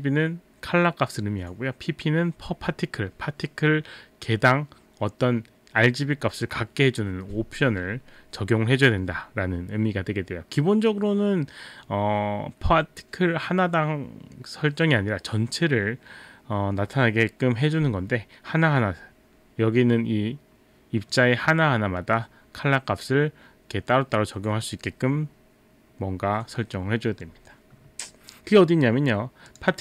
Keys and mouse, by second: 29.5 click.